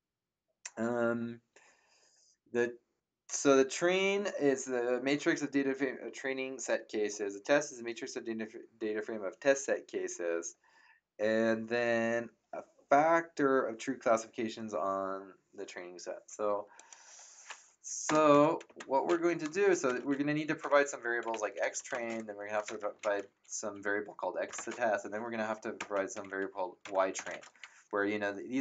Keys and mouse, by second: 16.7 click, 18.0 BackSpace, 18.6 End, 19.8-24.5 typing, 25.8-27.8 typing.